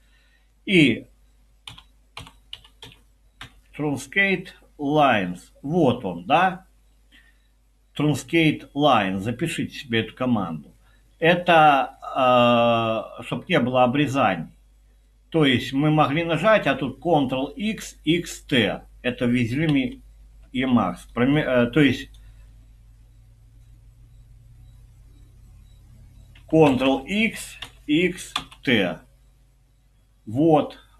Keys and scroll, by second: 1.4-3.4 typing, 19.7 Escape, 26.7 ctrl+x, 27.6-28.8 typing.